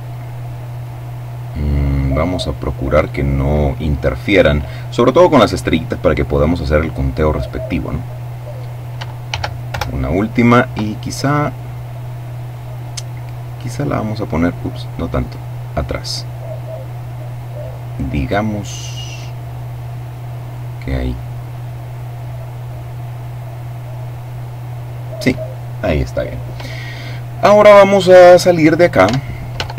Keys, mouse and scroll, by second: 1.4-3.2 drag, 8.9 shift+d, 9.3 shift+Return, 12.2-15.5 drag, 15.5-17.7 drag, 18.4-20.6 drag, 28.6 Tab.